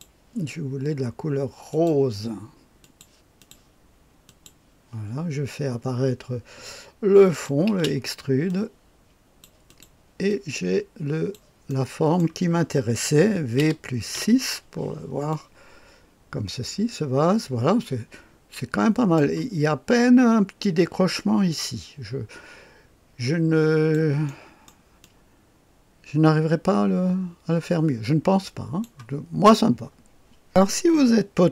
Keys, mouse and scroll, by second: 1.6 click, 2.7 click, 3.3 click, 4.2 click, 7.2 click, 7.6 space, 8.4 click, 10.2-11.3 drag, 11.6 middle click, 13.5 v, 14.0 KP_6, 15.2-19.1 drag, 21.0-23.9 drag, 24.2-28.7 drag.